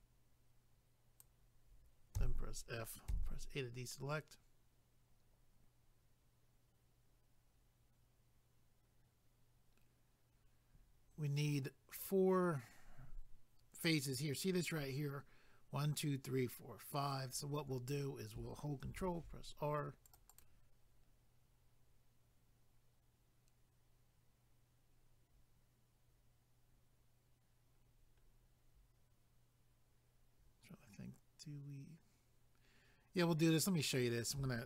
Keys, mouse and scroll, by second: 2.2 f, 18.9 ctrl+r, 20.1 click, 20.3 click, 20.4 double click, 27.8-28.2 scroll down 2, 30.1 scroll up 1, 33.1-34.3 scroll up 1, 34.3 scroll up 1.